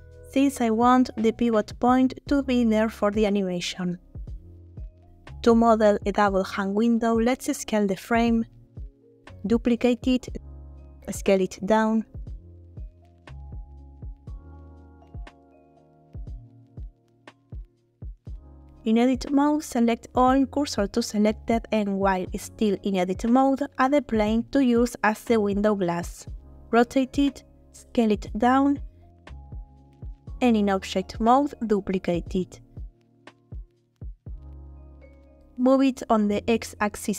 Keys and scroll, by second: 1.3 shift+s, 2.0 Tab, 6.4 s, 7.0 y, 10.0 shift+d, 10.8 Escape, 11.9 s, 14.1 z, 16.3 g, 16.4 z, 18.5 Tab, 20.2 a, 21.2 shift+s, 23.2 shift+a, 24.5 r, 24.7 y, 25.2 9, 26.4 s, 28.9 s, 29.0 z, 31.1 Tab, 31.9 shift+d, 32.5 shift+Escape, 33.3 g, 33.4 z, 35.9 g, 36.0 x.